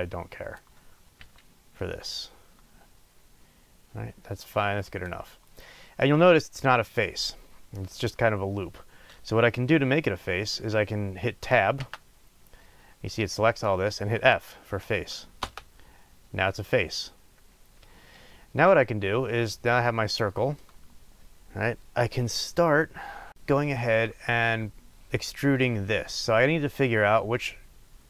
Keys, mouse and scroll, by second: 1.2 s, 11.7 b, 18.0-18.4 scroll up 1, 20.5 shift+middle click.